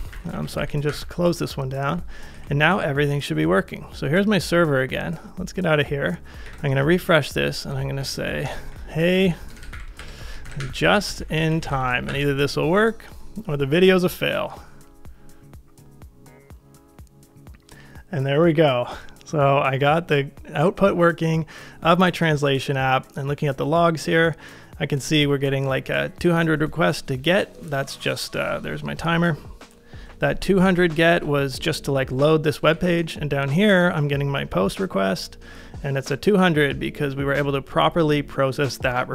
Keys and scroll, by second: 0.0 ctrl+a, 0.5 ctrl+a, 2.3 super+Tab, 6.5 super+r, 8.2-11.7 typing, 31.2 super+Tab, 32.8 super+Tab.